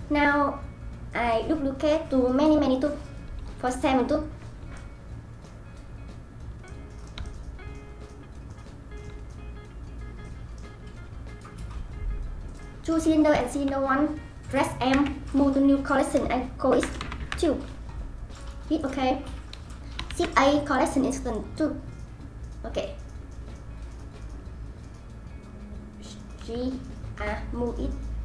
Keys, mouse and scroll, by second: 4.7-5.6 middle drag, 5.6 scroll down 1, 5.9-6.6 scroll up 4, 6.6-9.2 middle drag, 9.2-10.2 scroll down 1, 10.2-10.8 middle drag, 10.8-12.4 scroll down 2, 12.4 click, 13.4 ctrl+click, 14.9 m, 20.1 shift+a, 26.4 g.